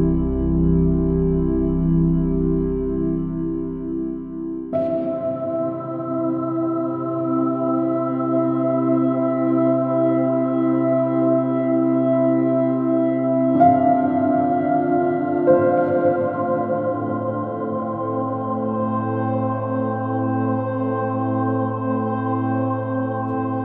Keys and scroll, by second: 8.4 |, 9.2 BackSpace, 9.9 BackSpace, 15.7 super+-, 17.7 space, 18.5 super+-, 20.5 super+i, 22.9 space, 23.5 p.